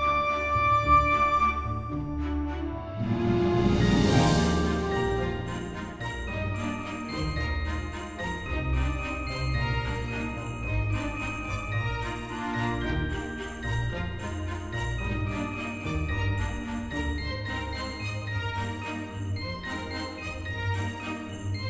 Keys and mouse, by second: 0.3 click, 2.0 middle click, 3.6 shift+a, 5.2 click, 5.9 g, 6.9 x, 8.0 click, 8.9 s, 10.7 click, 11.1 s, 11.2 x, 12.6 click, 12.9 z, 13.9 click, 14.4 KP_3, 15.9 s, 17.5 click, 17.9 shift+middle click, 18.6 g, 18.7 z, 20.9 click, 21.2 Tab.